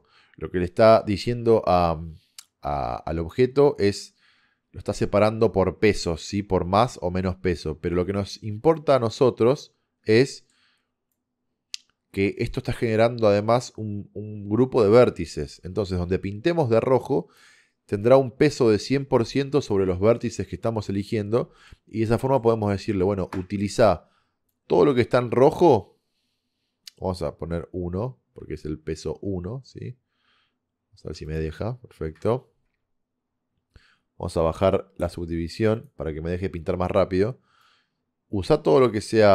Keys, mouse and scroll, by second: 9.8-17.5 middle drag, 21.2 middle click, 23.3 KP_0, 38.2 click.